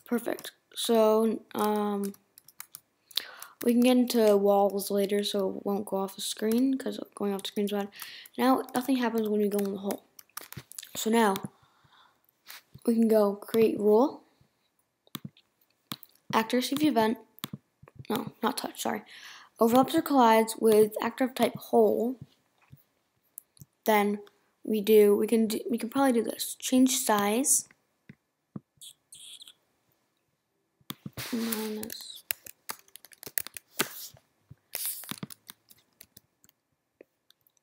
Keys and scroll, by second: 3.6 Down, 34.8 Return.